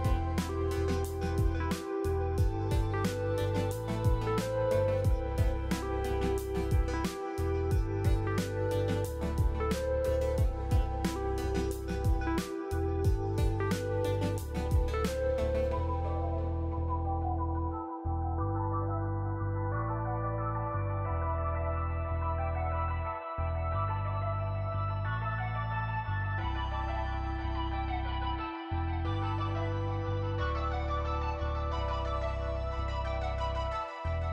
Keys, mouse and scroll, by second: 0.8 click, 1.2 Delete, 1.8 click, 3.1 Tab, 4.0-7.2 typing, 8.4-10.0 typing, 11.2-11.9 typing, 13.6 Return, 15.5 click, 16.6 click, 23.9 click, 24.8-26.2 typing, 30.5 click, 31.7 click, 32.4 click, 32.7 click, 33.3 click.